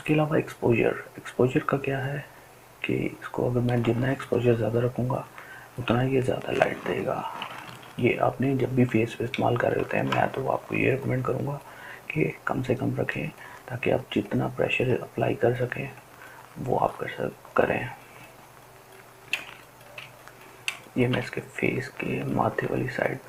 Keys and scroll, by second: 8.3 ctrl+alt+z, 8.9 ctrl+alt+z.